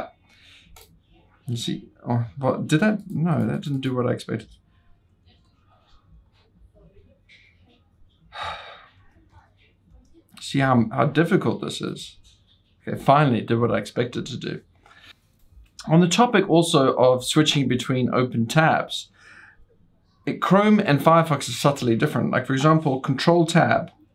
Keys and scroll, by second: 5.7 ctrl+w, 6.0 ctrl+t, 6.1-7.2 typing, 9.0 typing, 10.0-10.8 typing, 11.8 typing.